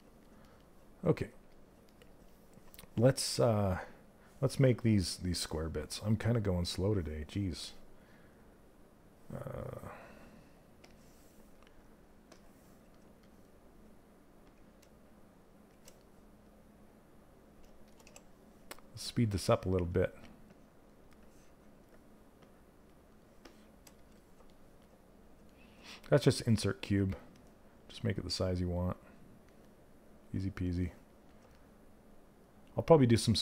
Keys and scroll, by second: 17.6 w.